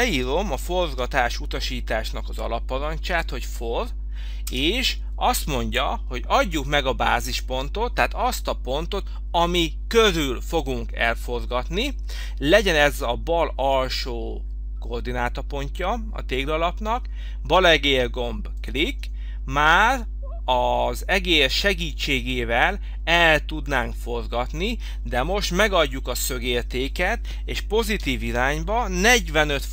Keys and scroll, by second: 0.1 f, 0.8 f, 4.5 Return, 28.8 4.